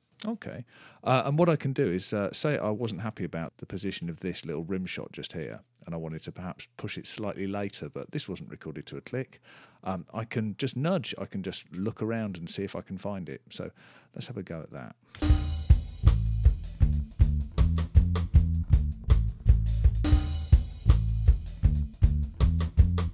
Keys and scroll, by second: 15.0 space.